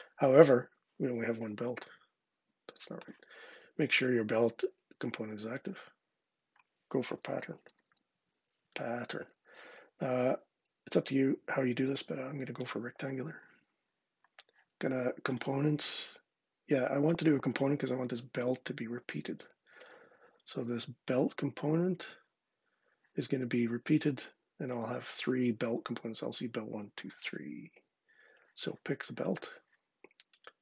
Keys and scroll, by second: 6.5-8.5 typing, 10.7 Down, 11.6 Down, 12.4 Return.